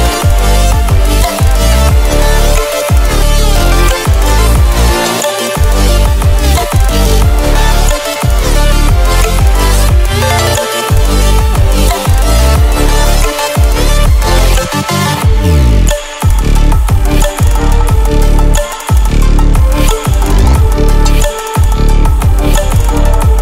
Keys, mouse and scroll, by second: 8.9-11.2 drag, 22.0-23.3 drag.